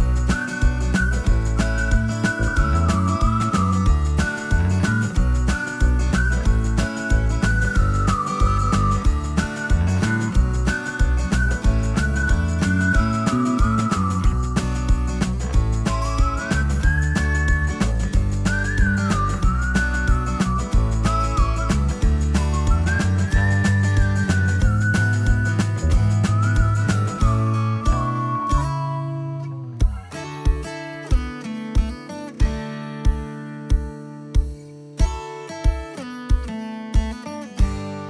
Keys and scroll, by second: 7.7 ctrl+s, 22.1-26.0 typing, 27.3 Escape.